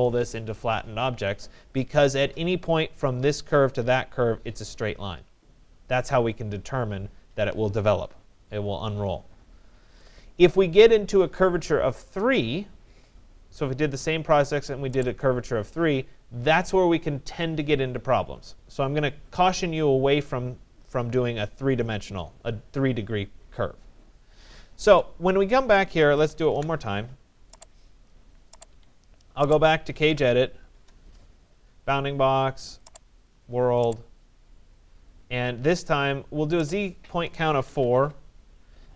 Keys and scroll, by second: 26.0 Return, 28.7 Escape, 30.7 Return, 37.2 4, 37.9 Return.